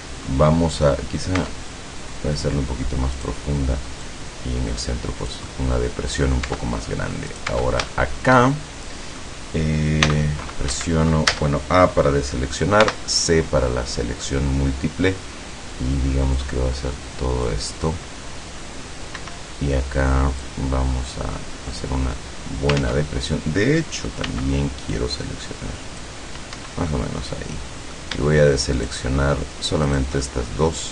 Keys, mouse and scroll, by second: 1.5 Tab, 3.2 right click, 4.1-5.5 drag, 5.5-6.5 middle drag, 7.4 right click, 7.6 Tab, 8.1-9.5 shift+middle drag, 10.2 c, 10.9 Escape, 11.4 a, 12.9 c, 16.5-17.8 drag, 19.3 Escape, 20.5-23.1 drag, 22.9 ctrl+z, 24.3 c, 25.1-26.3 drag, 26.7 Escape, 27.0-28.2 middle drag, 28.9 shift+right click, 30.0 shift+right click, 30.3-30.9 shift+middle drag.